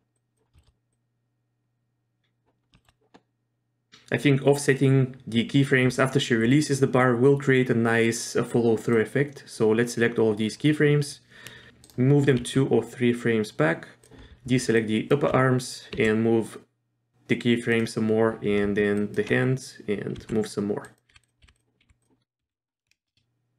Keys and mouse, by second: 0.1 click, 0.6 shift+middle click, 0.9-2.2 drag, 2.7 shift+middle click, 8.9-10.5 drag, 11.7 g, 12.4 g, 14.8 ctrl+click, 16.0 g, 19.1 ctrl+click, 20.1-22.9 typing.